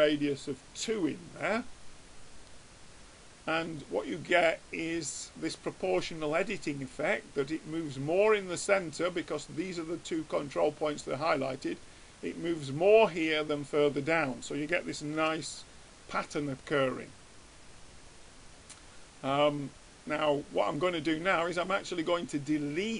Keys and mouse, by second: 2.4-6.2 middle drag, 14.2-15.9 middle drag, 15.6 Tab.